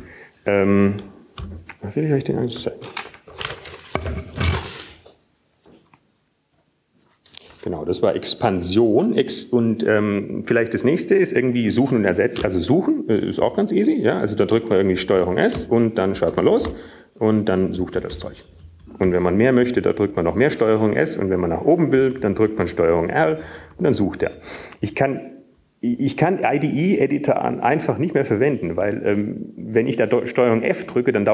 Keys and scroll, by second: 2.3 Up, 2.3 Down, 2.3 Return, 3.8 Up, 4.9 Tab, 16.3 s, 18.6 BackSpace, 18.8 ctrl+s, 20.1 typing, 20.9 ctrl+s, 21.4 ctrl+s, 21.4 typing, 21.5 ctrl+s, 25.6 ctrl+r, 26.9 ctrl+r, 29.2 ctrl+r.